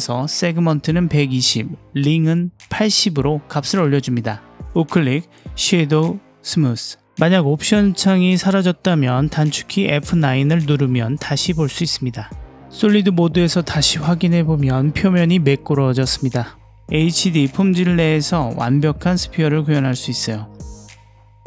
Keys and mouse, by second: 5.6 right click, 9.7 F9, 9.9 middle click, 12.9-14.0 drag, 14.1-15.2 middle drag, 15.4 middle click, 16.5-17.5 drag, 17.7-18.8 middle drag, 19.6 click, 20.0 Tab.